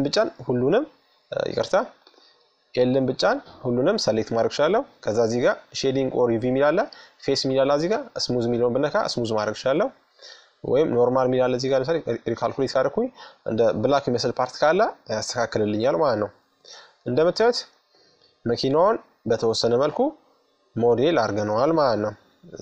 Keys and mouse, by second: 0.6-2.3 right drag, 1.5 l, 4.3-6.2 drag, 6.7-8.3 drag, 9.8-12.7 drag, 12.7-14.0 middle drag, 14.0-15.8 drag, 15.7-18.3 middle drag, 20.0-22.6 middle drag, 21.7 Tab.